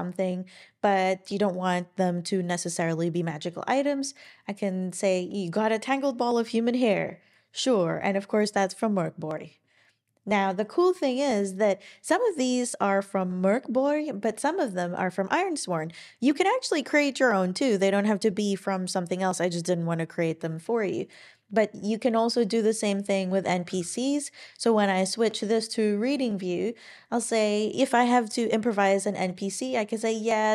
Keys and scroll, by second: 23.7 super+e.